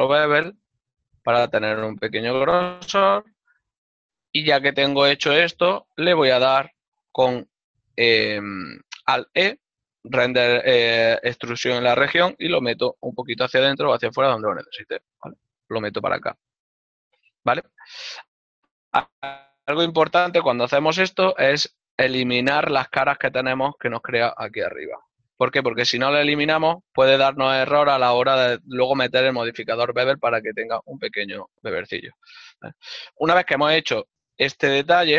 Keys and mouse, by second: 5.3 shift+click, 5.8 ctrl+middle click, 7.2 alt+e, 12.2 click, 16.4 middle click, 21.3 middle click, 23.7 ctrl+Tab, 24.5 click, 24.9 right click, 25.2 shift+right click, 26.1 x, 26.3 click, 26.7 ctrl+middle click, 30.6 right click, 31.7 x, 32.1 click, 32.3 ctrl+middle click.